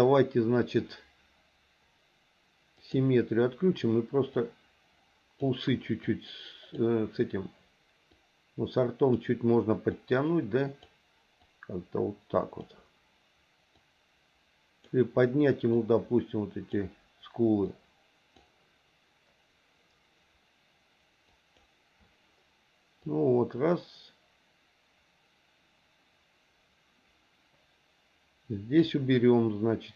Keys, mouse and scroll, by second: 2.8 click, 4.3-5.4 drag, 6.1 click, 8.1-9.2 drag, 10.0 click, 11.5-12.6 drag, 13.8-14.8 drag, 15.8 click, 17.7 click, 21.4 click, 23.1-28.9 drag.